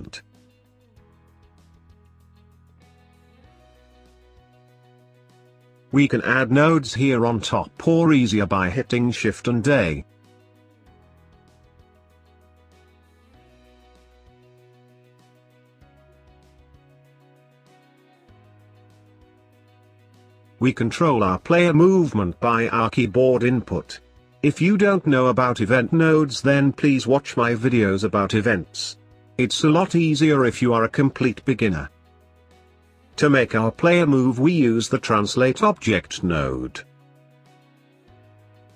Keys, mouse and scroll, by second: 0.1-2.0 scroll up 1, 2.0-2.4 scroll down 2, 2.4 scroll up 2, 2.7-5.6 scroll down 1, 5.8-9.0 drag, 9.8-12.8 drag, 13.4 shift+a, 15.8 shift+a, 17.1 click, 17.4 shift+a, 25.4-25.8 scroll up 6, 25.8 middle click, 26.3 scroll up 3, 26.5-27.5 middle drag, 27.5 click, 28.5-30.8 middle drag, 30.8 shift+a, 36.4 click, 38.5 click.